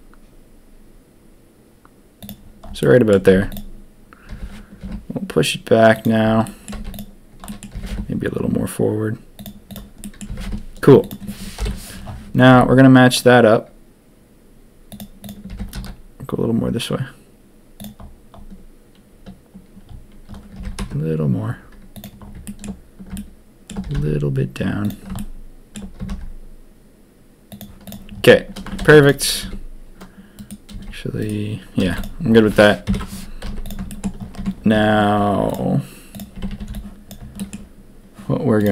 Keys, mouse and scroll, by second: 2.8 click, 3.3 z, 4.2 g, 6.4 drag, 6.7 z, 7.4 click, 7.7 g, 10.0 click, 10.2 g, 11.5 ctrl+KP_1, 12.5 s, 15.4 g, 20.5 g, 22.4 shift+middle drag, 23.1-23.6 shift+middle drag, 23.8 g, 25.1-25.7 shift+drag, 28.8 ctrl+a, 29.4 s, 30.7 s, 31.8 ctrl+a, 32.8 ctrl+KP_3, 33.4 z, 33.9 shift+click, 34.3 Tab, 35.4 click, 36.1 click, 36.3 a, 36.5 a, 36.6 b, 37.3 shift+click.